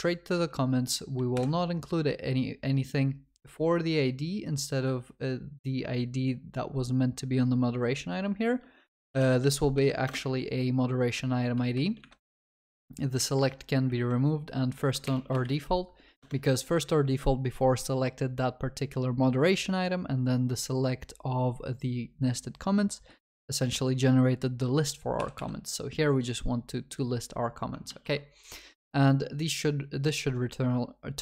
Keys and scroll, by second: 1.4 ctrl+y, 10.1 Return, 15.1 ctrl+BackSpace, 16.2 Return, 25.2 Delete, 27.9 Delete, 27.9 ctrl+s.